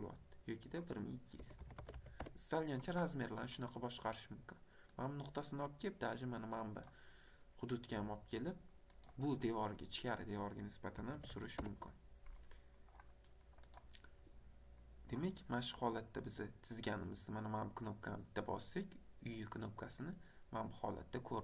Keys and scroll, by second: 1.4 KP_1, 1.6 KP_2, 1.7 KP_0, 2.2 Return, 11.0 KP_5, 11.1 KP_0, 11.5 Return.